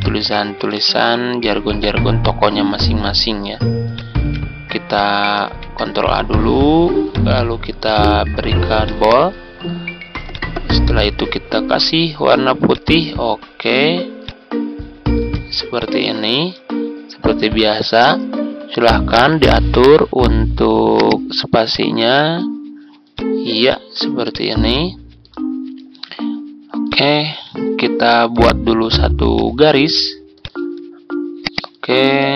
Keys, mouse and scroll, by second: 0.7 ctrl+v, 3.9 click, 4.1 ctrl+a, 4.9 click, 5.4 ctrl+a, 7.0 click, 15.7 click, 16.9 ctrl+scroll up 1, 19.6 click, 25.4-25.8 ctrl+scroll up 1, 26.8 click, 27.6 ctrl+scroll down 1, 29.2 click, 31.4 ctrl+click, 31.6 ctrl+click.